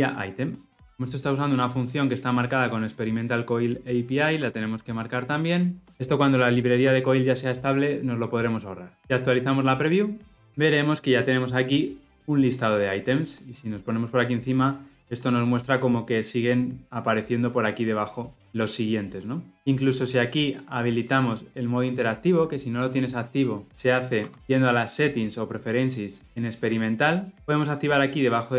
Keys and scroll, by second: 4.7 alt+Return, 10.4 ctrl+-, 25.6 ctrl+alt+s.